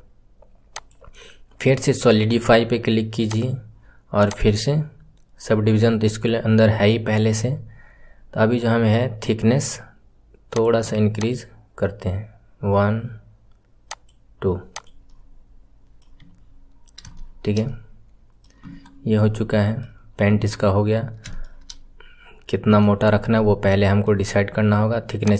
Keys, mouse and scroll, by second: 4.2-6.8 drag, 6.8-10.2 scroll down 2, 10.4-14.8 drag, 15.0-16.2 middle drag, 16.2-17.1 scroll up 8, 17.1-18.6 shift+middle drag, 18.6 KP_1, 18.8-19.1 scroll down 1, 19.1-20.2 middle drag, 20.2 KP_1, 20.8-21.2 scroll down 1, 21.2-23.0 shift+middle drag, 23.0-23.3 scroll up 1, 23.3-25.1 middle drag, 25.1-25.3 drag.